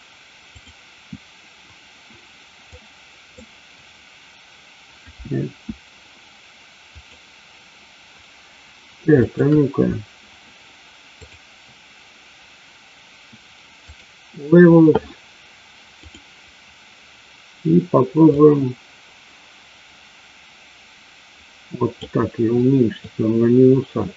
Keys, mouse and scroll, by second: 0.5 click, 2.8 click, 5.2 s, 9.2 shift+click, 11.2-14.0 drag, 15.9 click, 18.2-21.9 drag, 22.9-24.1 middle drag.